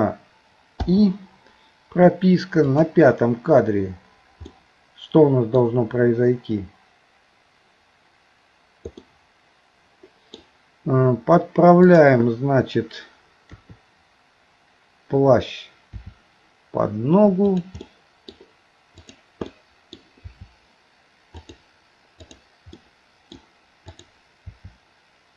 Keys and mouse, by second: 0.9 i, 2.7 click, 4.5-5.6 middle drag, 9.0-10.4 middle drag, 13.5 KP_3, 15.9 r, 17.8 middle click, 19.1 click, 19.5 middle click, 20.3 r, 22.2 click, 22.8 middle click, 23.9 click, 24.4 r.